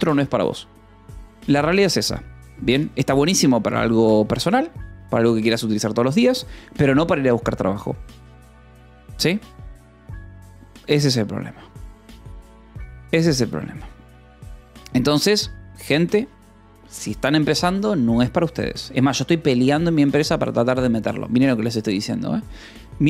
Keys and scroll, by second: 18.9 :, 19.1 space.